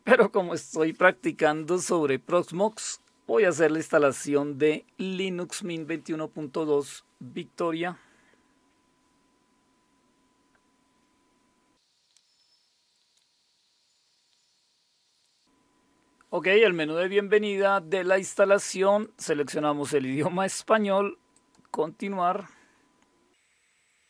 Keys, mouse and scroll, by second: 13.9 click, 19.0 click, 21.3 click.